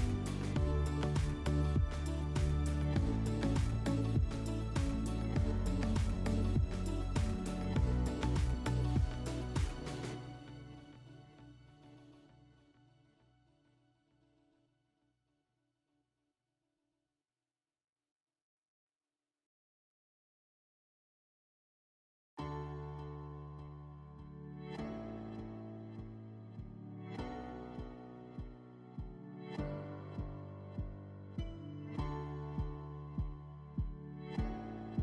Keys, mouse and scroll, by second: 1.1-2.6 drag, 5.3 click, 6.6 click, 9.7-11.1 drag, 12.3 click, 13.2-13.8 drag, 14.1 alt+w, 16.6 click, 17.7 alt+w, 21.5 alt+middle click, 22.7 click, 23.8 ctrl+click, 24.6 ctrl+click, 26.3 ctrl+click, 27.5 ctrl+click, 28.4 F4, 31.0 alt+middle click.